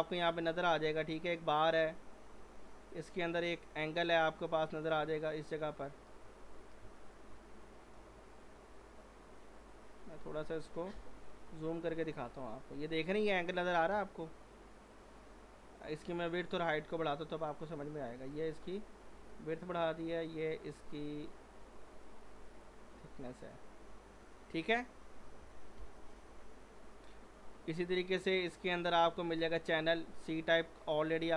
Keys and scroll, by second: 6.8 z, 25.8 g.